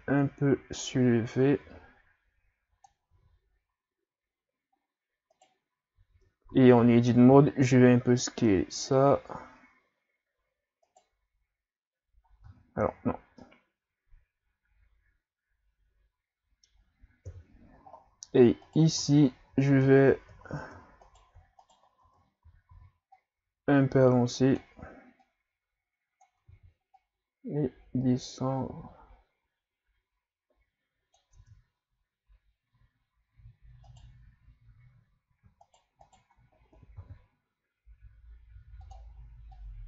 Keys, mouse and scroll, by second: 3.1 a, 3.5 scroll down 4, 4.7 scroll up 4, 5.3 right click, 6.2 Tab, 6.5 a, 6.8 a, 7.3 s, 11.1 middle click, 12.5 Tab, 12.8 a, 13.0-13.4 scroll down 4, 13.4-17.3 middle drag, 17.3 KP_3, 17.9 scroll up 6, 18.6 right click, 19.0 Tab, 19.4 a, 19.7 a, 20.6 Tab, 21.0 right click, 21.6 shift+right click, 22.1 Tab, 22.5 a, 22.7 a, 23.2-25.5 drag, 26.5 ctrl+z, 27.0-31.1 drag, 31.4 Tab, 33.9 right click, 35.7 shift+right click, 36.1 shift+right click, 37.0 r, 39.5 click.